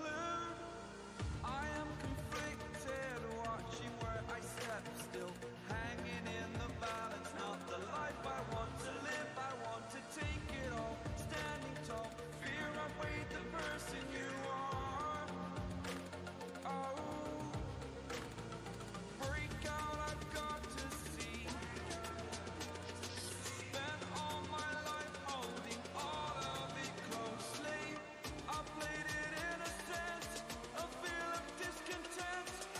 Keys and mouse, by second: 17.4-18.4 drag, 21.1-21.7 drag.